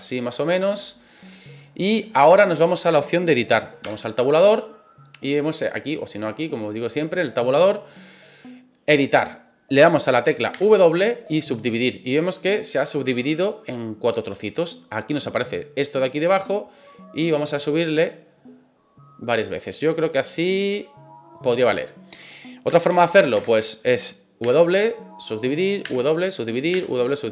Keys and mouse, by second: 1.9 middle click, 3.8 Tab, 6.0-7.0 drag, 10.5 w, 17.2-19.4 drag, 20.6 right click, 22.9 ctrl+z, 23.3 ctrl+z, 24.4 w, 25.8 w, 26.7 w.